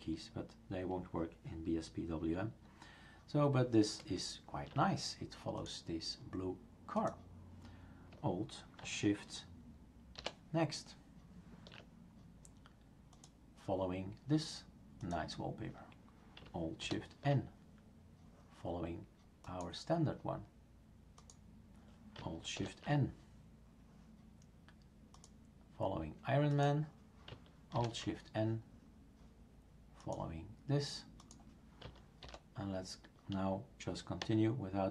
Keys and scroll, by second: 10.2 alt+shift+n, 16.8 alt+shift+n, 22.6 alt+shift+n, 27.8 alt+shift+n, 32.2 alt+shift+n, 34.2 alt+shift+n.